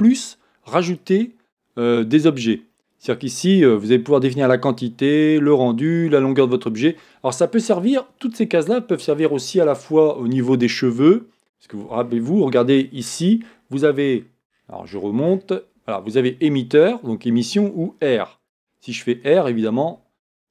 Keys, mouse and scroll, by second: 1.2-2.9 drag, 2.9-7.3 scroll down 1, 12.1-12.6 scroll up 2, 12.6 scroll down 2, 12.7-14.3 scroll up 2, 14.3-14.8 scroll up 1.